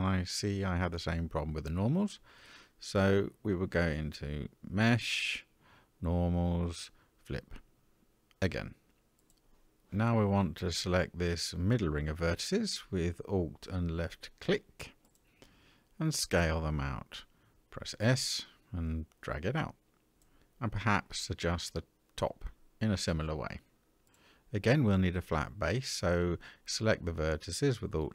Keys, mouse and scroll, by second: 3.0 a, 4.6-8.0 drag, 9.1 middle click, 14.4 alt+click, 17.2 s, 20.2 alt+click, 21.7 s, 23.6 middle click, 26.4 alt+click.